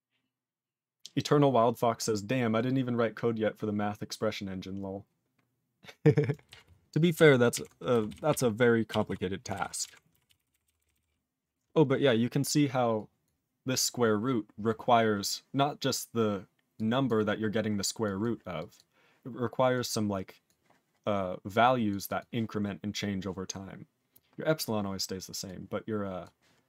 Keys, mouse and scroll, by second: 6.6 ctrl+x, 7.1 ctrl+alt+b, 7.5 ctrl+alt+f, 8.1 ctrl+s, 8.3 ctrl+e, 9.0 ctrl+s, 9.5 ctrl+alt+b, 9.8 ctrl+alt+f, 10.2 ctrl+s, 10.3 ctrl+n, 10.5 ctrl+n, 10.6 ctrl+n, 10.8 ctrl+n, 10.9 ctrl+n, 12.9 click, 13.2 click, 16.7 click, 17.0 click, 18.0 click, 18.2 click, 18.5 click, 18.7 click, 19.7 click, 20.4 click, 21.5 click, 21.9 click, 22.0 click, 22.1 click, 24.1 click, 24.5 click, 25.4 click, 26.2 click.